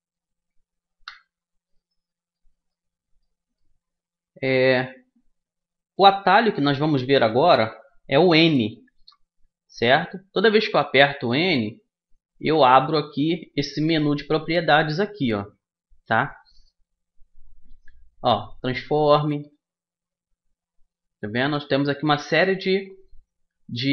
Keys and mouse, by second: 0.9 KP_3, 4.4-8.9 middle drag, 8.9 n, 11.3-13.4 middle drag, 13.4-15.2 drag, 19.5-21.3 drag.